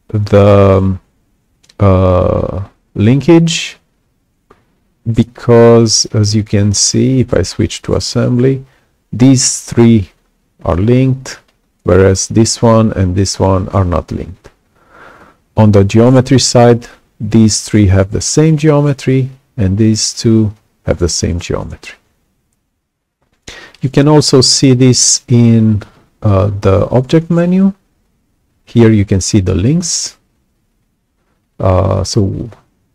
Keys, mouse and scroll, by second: 6.3 click, 24.1 right click.